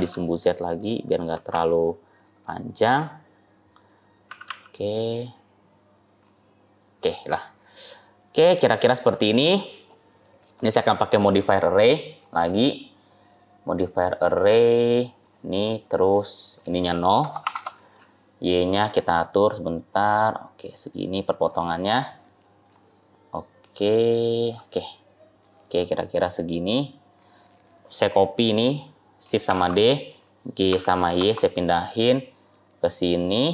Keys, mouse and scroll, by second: 1.2 g, 2.3 middle click, 2.9-3.4 scroll up 2, 3.5-4.2 scroll up 2, 4.2 s, 6.7 middle click, 7.7-8.3 scroll down 2, 8.2 click, 9.7 click, 10.5 middle click, 12.1 click, 16.5 click, 18.6 click, 22.6 click, 25.3 click, 29.3 shift+d.